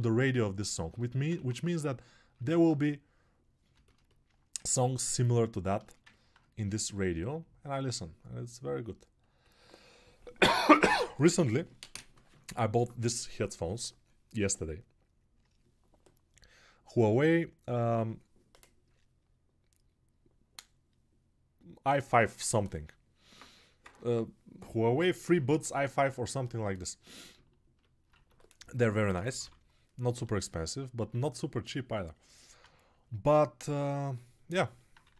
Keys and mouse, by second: 1.6 ctrl+1, 28.1 1.